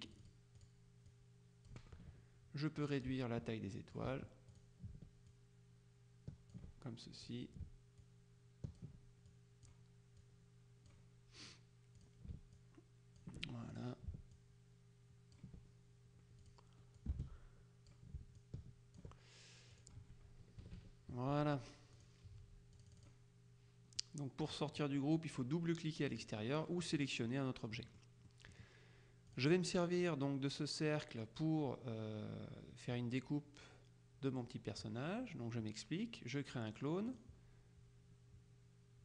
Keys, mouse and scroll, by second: 0.2 click, 3.2-4.6 ctrl+drag, 4.7 click, 5.4-7.2 ctrl+drag, 7.4 click, 8.1-9.4 ctrl+drag, 9.6-11.5 drag, 12.1 click, 16.5 click, 17.2 space, 19.8 click, 20.7 KP_Subtract, 22.0 click, 22.8 click, 24.1-25.1 middle drag, 26.2 click, 27.1 click, 28.0 middle click, 29.4 click, 37.2 click.